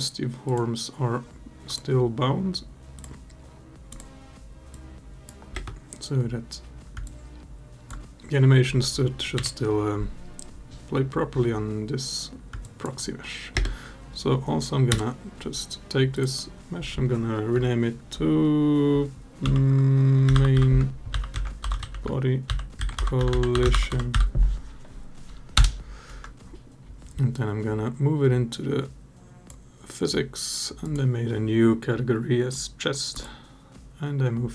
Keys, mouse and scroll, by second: 0.2 click, 1.5 click, 2.7 click, 3.7 click, 4.6 click, 5.3 space, 6.8-7.7 alt+drag, 12.4 alt+click, 13.3 space, 15.9 click, 16.1-25.4 drag, 23.1 l, 27.2 click, 30.6 click, 32.9 click.